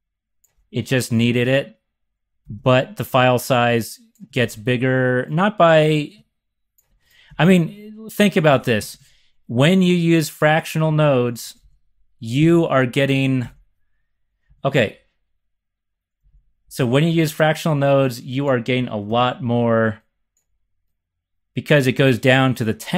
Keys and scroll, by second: 2.4 shift+super+c, 4.3 shift+super+c, 7.2 x, 8.7 z, 9.0 z, 11.4 x, 11.6 x, 12.3 super+s, 13.4 x, 14.4 x, 16.3 z, 17.1 z, 19.0 ctrl+shift+c.